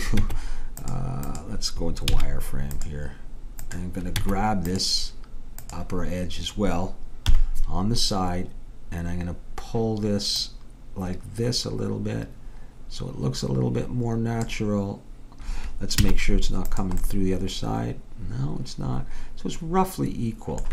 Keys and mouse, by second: 0.3 Tab, 2.1 z, 4.3 Tab, 7.3 KP_3, 10.5 click, 16.1 z, 17.1-19.0 middle drag.